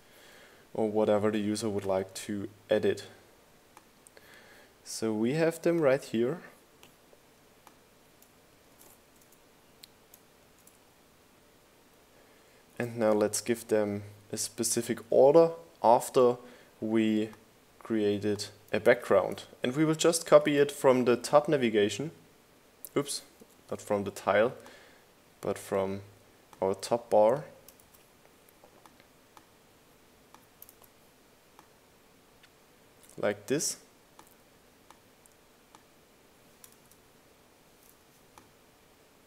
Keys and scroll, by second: 9.5 shift+Down, 17.8 super+c, 19.4 super+v, 22.1 BackSpace, 26.7 super+c, 29.7 super+v, 35.7 super+z, 39.1 Up.